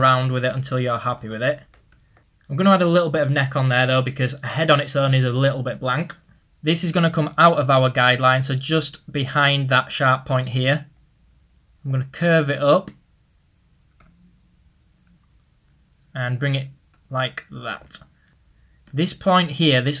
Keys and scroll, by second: 4.1 typing, 10.0 ctrl+z.